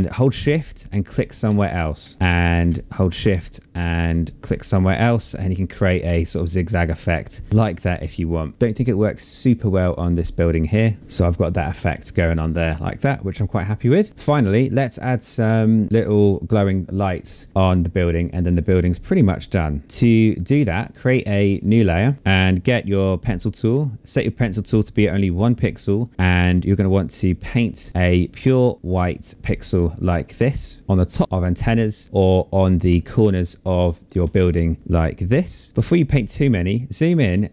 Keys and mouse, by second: 0.8 ctrl+z, 1.2 click, 4.4 shift+click, 5.7 shift+click, 8.3 ctrl+z, 10.5 click, 11.0 ctrl+z, 11.2 shift+click, 11.4 shift+click, 11.7 click, 11.9 shift+click, 12.0 shift+click, 12.2 click, 12.6 shift+click, 12.8 shift+click, 12.9 z, 12.9 shift+click, 13.3 shift+click, 13.6 shift+click, 16.8 click, 18.1 click, 20.5 click, 21.7 click, 23.4 click, 26.6 click, 27.9 click, 31.2 click, 33.4 click, 34.8 click.